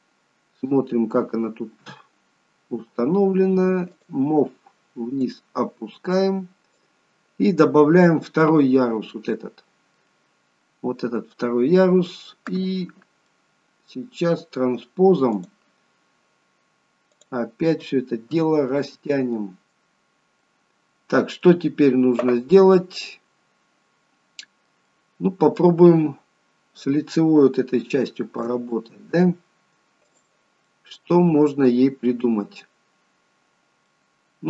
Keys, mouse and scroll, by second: 1.7 KP_1, 3.9 click, 5.2 click, 7.6 middle click, 10.5-10.9 scroll up 1, 13.3 middle click, 15.3 click, 17.1 click, 18.3 KP_1, 19.6 middle click, 20.1-20.5 scroll up 1, 20.5 middle click, 22.6-23.4 scroll up 2, 23.0 middle click, 24.9 middle click, 26.5-27.3 scroll down 2, 27.8 shift+middle click, 27.8-28.8 scroll down 2, 28.8 middle click, 30.1 click, 30.7 middle click, 32.4-33.1 scroll up 2, 33.9 middle click.